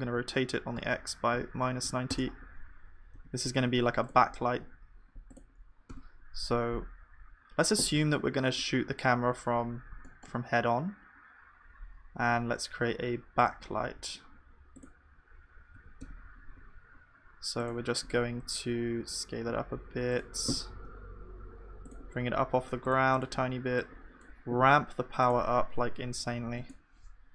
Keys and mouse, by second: 0.2 r.